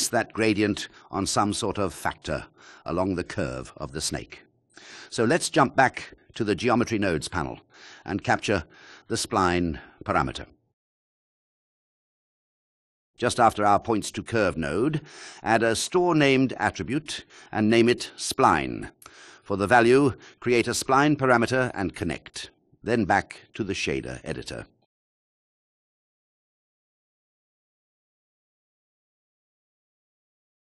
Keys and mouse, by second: 5.7-6.7 drag, 6.8 click, 7.4-8.1 drag, 8.4 drag, 14.2 click, 15.8 shift+a, 18.1 click, 18.7 click, 18.7 BackSpace, 22.1 shift+a, 26.2 click, 27.2 click, 29.9 click.